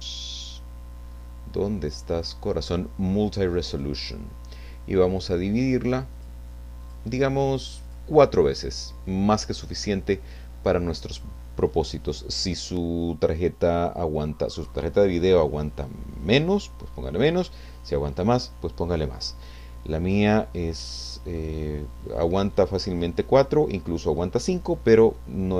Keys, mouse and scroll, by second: 3.7 click, 5.5 click, 6.8 click, 7.8 click, 20.5 scroll up 2, 20.9-21.4 scroll down 2, 21.4-23.2 middle drag.